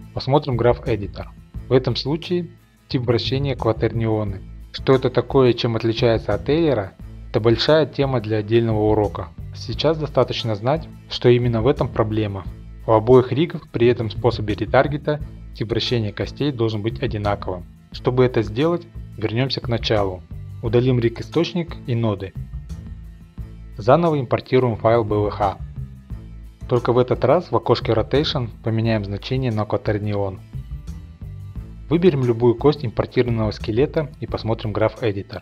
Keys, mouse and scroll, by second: 12.6 scroll down 1, 12.8-14.2 drag, 14.2-14.8 middle drag, 14.8-15.5 scroll down 2, 15.5 scroll down 1, 15.7-16.8 drag, 16.8 middle click, 19.3 click, 20.1 click, 21.1 click, 23.1 middle click, 23.9 click, 25.2 click, 26.5 click, 30.8 click, 31.5 click, 33.0 ctrl+Tab, 33.2 click.